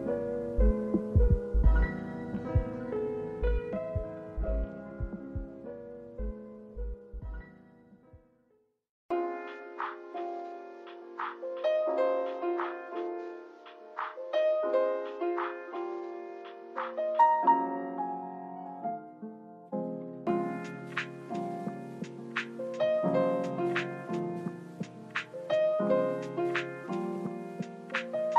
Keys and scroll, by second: 2.4 space, 5.2 space, 6.4 space, 7.5 space, 8.4 space, 11.3 space, 11.9 space, 12.9 space, 14.0 space, 14.5 space, 16.4 space, 17.3 space, 18.1 space, 19.1 space, 20.2 space, 21.4 space, 22.5 space, 23.1 space, 23.7 space, 28.0 space.